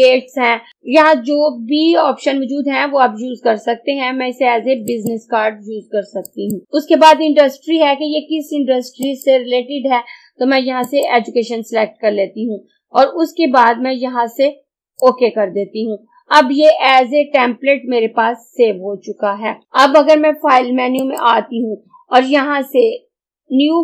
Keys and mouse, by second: 5.0 click, 9.1 click, 14.8-17.6 drag, 21.0 click.